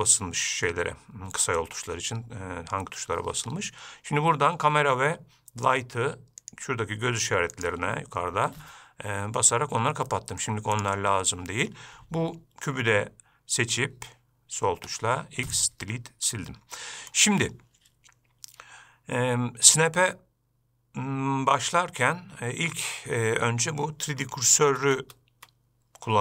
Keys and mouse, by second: 6.7 click, 7.8 click, 10.3 middle click, 15.0 x, 16.6-17.4 middle drag.